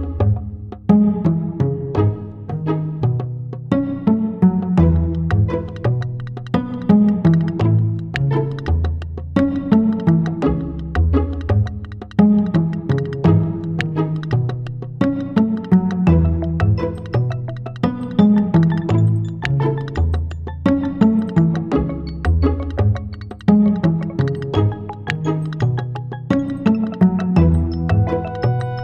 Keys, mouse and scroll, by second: 0.4 click, 1.1 shift+d, 2.3 click, 2.8 shift+d, 4.8 shift+d, 6.5 shift+d, 7.5 click, 8.1 shift+d, 9.4 click, 10.0 shift+d, 13.0 click, 14.3 click, 15.4 click, 17.8 right click, 19.2 click, 20.0 click, 21.2 click, 22.4 click, 25.1 right click, 26.5 click.